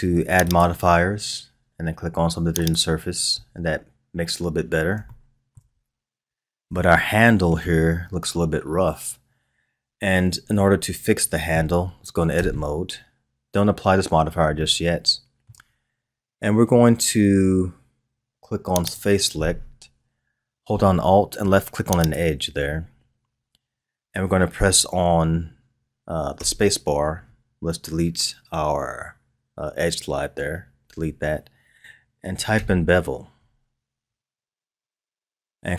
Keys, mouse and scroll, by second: 0.4-3.4 drag, 3.4-3.9 scroll down 2, 5.1-5.9 shift+middle drag, 5.9-6.8 scroll up 3, 6.8-9.8 shift+middle drag, 12.3 Tab, 14.5-17.6 shift+middle drag, 18.9 click, 22.0 alt+click, 26.3 space.